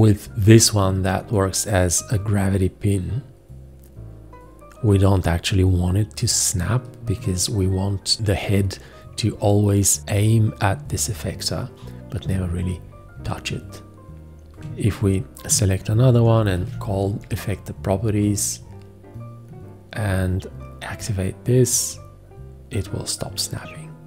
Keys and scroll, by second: 16.6 alt+g.